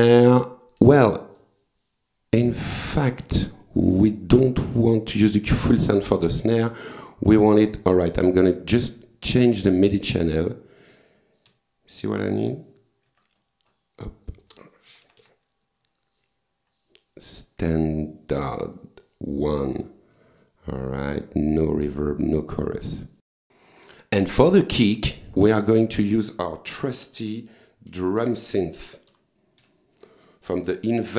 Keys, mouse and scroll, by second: 0.7 click, 2.8 click, 3.9 click, 6.8 click, 8.0 click, 10.4 click, 11.5 Page_Down, 13.1 Page_Up, 13.7 scroll up 2, 14.0-14.4 scroll down 2, 14.9 Page_Down, 18.4 click, 20.2 click, 23.3 click, 24.3 click, 24.7 right click, 25.2 click, 27.9 d, 28.2 r, 29.1 u, 29.6 m.